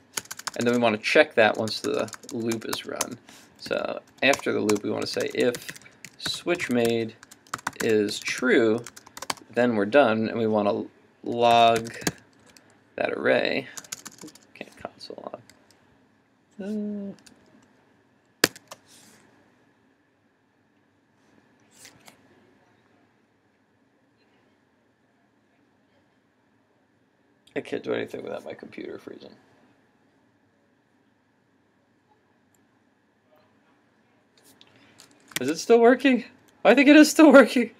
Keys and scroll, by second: 18.5 alt+shift+super+1, 35.4 super+Tab.